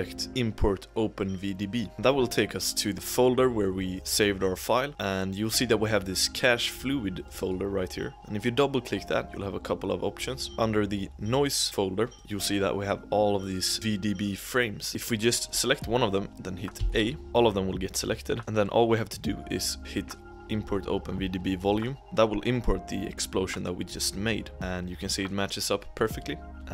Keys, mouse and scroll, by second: 24.5 g, 26.5 click.